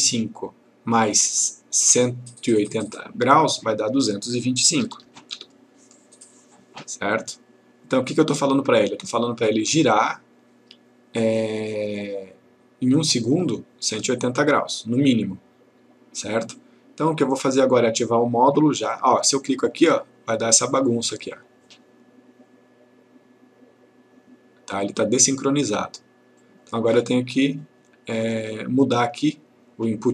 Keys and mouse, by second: 3.7 click, 4.9 typing, 6.0 click, 19.8 click, 26.4 click, 29.1 click.